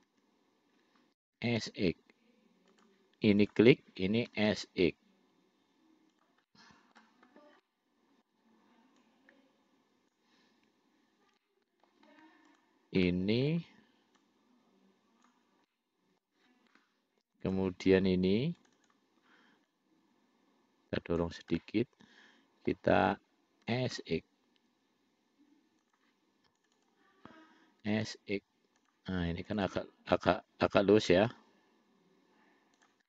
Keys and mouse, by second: 0.4 ctrl+z, 1.6 s, 3.7 click, 4.6 s, 6.7 middle click, 7.9 middle click, 9.3-10.5 drag, 11.7 middle click, 12.8 shift+click, 13.3 middle click, 14.4-15.7 drag, 15.9 middle click, 17.7 click, 18.8 click, 19.1 click, 20.0-21.5 drag, 21.9-23.0 middle drag, 23.9 s, 26.9 click, 27.1 click, 28.1 s, 29.8 click, 30.0 click, 31.4 s.